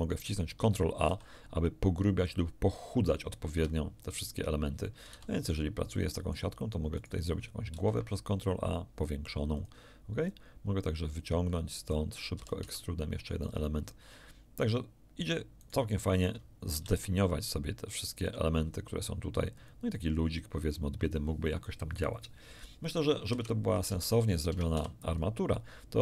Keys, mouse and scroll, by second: 1.0 ctrl+a, 3.5 Escape, 3.9-4.2 scroll down 1, 4.8 middle click, 5.0 z, 5.9 middle click, 6.9 right click, 7.7 ctrl+a, 9.5 click, 10.2-12.0 drag, 12.3 e, 12.6 z, 13.4 click, 15.6 click, 16.7 ctrl+a, 19.5 click, 23.2 1, 23.8 Tab, 24.4 Tab, 24.7 z.